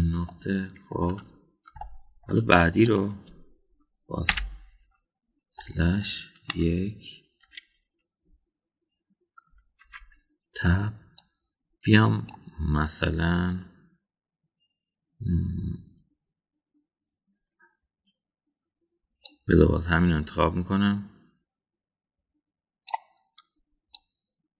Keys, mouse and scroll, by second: 0.4 /, 1.2-1.9 middle drag, 2.7 shift+middle click, 3.8 click, 5.2 /, 6.6-7.0 middle drag, 7.5 KP_1, 8.6 KP_3, 10.8 Tab, 12.2-13.4 drag, 20.3-23.9 drag.